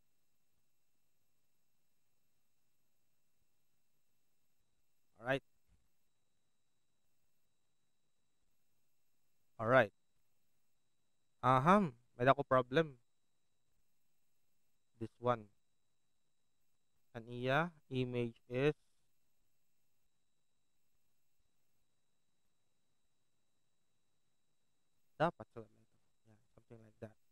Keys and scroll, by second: 11.8 alt+space, 17.6 alt+b.